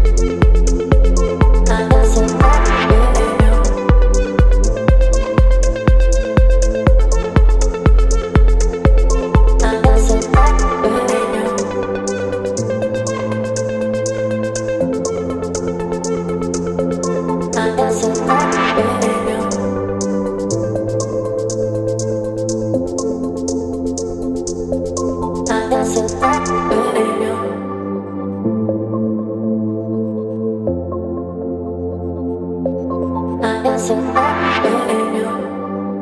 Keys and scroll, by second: 13.6 space, 17.2 Return, 18.9 space, 21.3 space, 25.0 b, 28.2 [, 29.5 space, 31.7 [, 32.6 [.